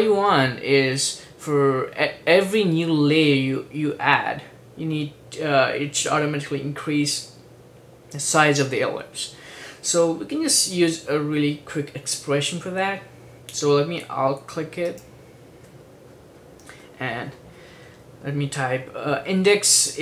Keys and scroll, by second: 19.1-20.0 typing.